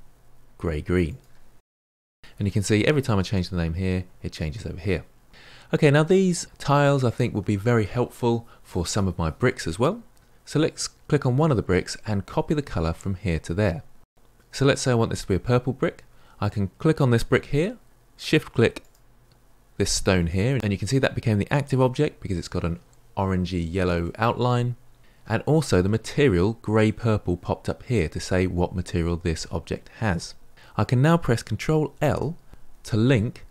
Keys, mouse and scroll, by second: 2.2 e, 5.3-10.4 middle drag, 10.4 click, 18.8 shift+click.